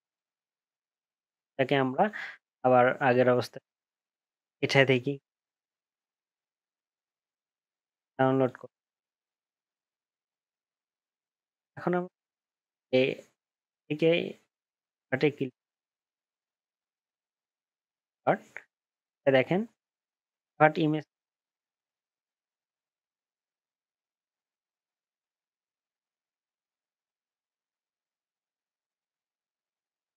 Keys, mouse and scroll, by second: 22.0 ctrl+z.